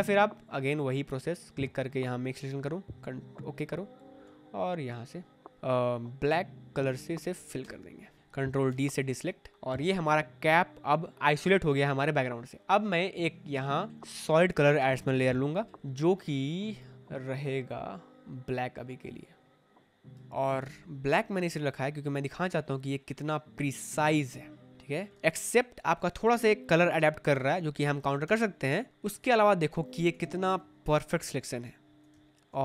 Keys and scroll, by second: 7.5 alt+BackSpace, 8.6 ctrl+d, 21.0 v, 25.4 ctrl+t, 28.2 ., 28.5 3, 29.8 space, 31.8 space.